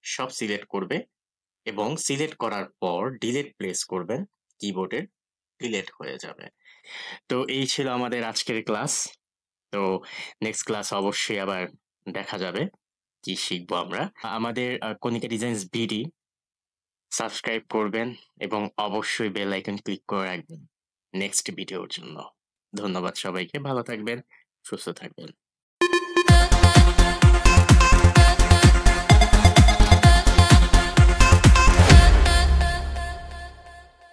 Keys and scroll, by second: 3.3 Delete.